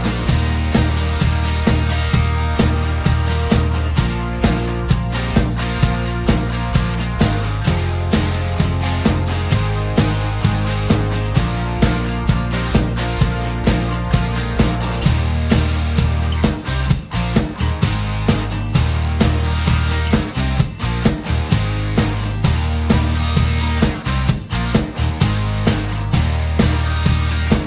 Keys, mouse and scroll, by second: 1.6-2.1 scroll up 2, 3.1 click, 3.8-4.5 scroll down 3, 4.7-5.1 scroll up 1, 6.6 click, 7.8-8.8 scroll down 3, 9.1 scroll up 1, 10.2 click, 11.4 click, 12.9-14.3 middle drag, 13.2-14.3 drag, 14.5 KP_2, 14.9 KP_5, 17.5 click, 18.4 KP_1, 18.6 KP_8, 18.7 KP_0, 21.7 click, 23.3 click, 24.3 KP_8, 26.3 click, 27.2 click.